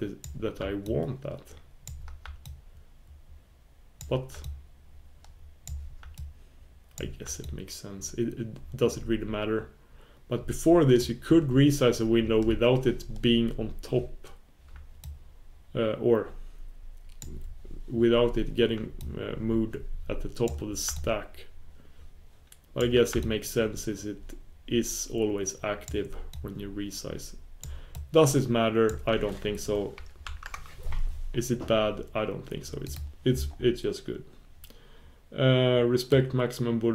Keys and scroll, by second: 30.3 super+1.